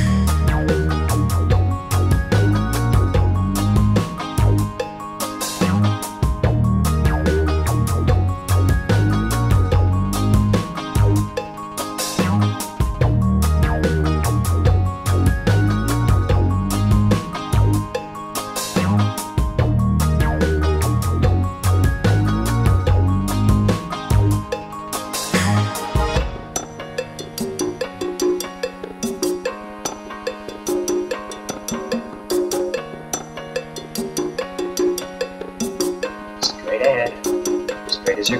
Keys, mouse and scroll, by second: 4.1 click, 8.4 ctrl+click, 10.2 ctrl+p, 17.9 click, 19.1-20.2 drag, 20.2 middle click, 20.7-22.2 scroll up 1, 25.1-26.6 drag, 31.1 ctrl+p, 36.1 click, 38.1 click.